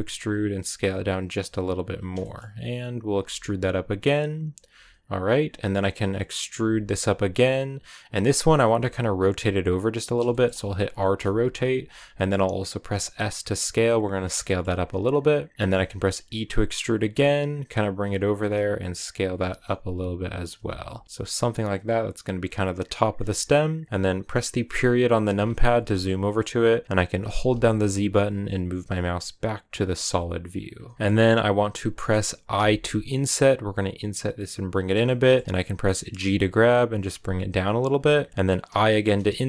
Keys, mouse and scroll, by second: 0.0 s, 2.0-3.1 shift+middle drag, 3.1 e, 6.5 e, 8.6 r, 10.1 shift+middle click, 10.4 scroll up 1, 10.7 r, 11.6 s, 14.3-15.6 shift+middle drag, 15.6 click, 15.8 e, 16.9 g, 18.2-21.0 typing, 23.3 middle click, 23.9 scroll down 1, 25.2 KP_Decimal, 25.7 scroll down 2, 25.9-27.3 middle drag, 27.3 z, 31.0-32.4 middle drag, 34.8-36.1 middle drag, 36.1 g, 37.9 middle click, 38.5 i.